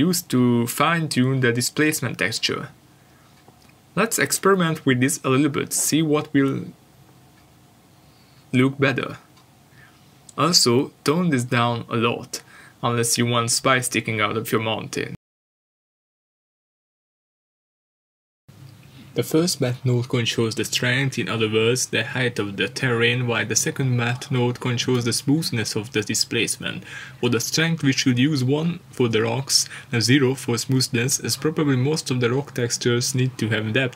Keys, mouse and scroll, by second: 6.8 middle click, 7.2-9.2 scroll up 1, 9.8 click, 15.3 middle click, 21.0-21.3 scroll down 1, 21.3 middle click, 21.8 shift+middle click, 23.5 click, 25.8 middle click, 26.3 scroll up 1, 27.0-27.8 scroll down 1, 27.8 click, 33.2-33.9 scroll down 1.